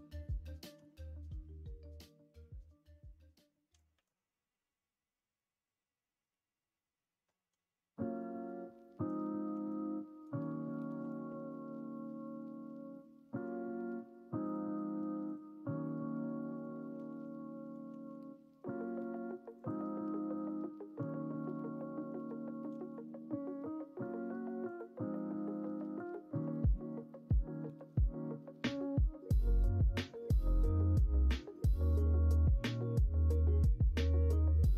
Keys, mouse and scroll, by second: 3.8 shift+a, 9.5 Tab, 10.0 shift+a, 16.8 middle click, 17.8 s, 22.6 s, 25.7 middle click, 26.8 middle click, 30.2 ctrl+a, 31.8 middle click, 32.3 Tab, 32.9 middle click, 33.7 r.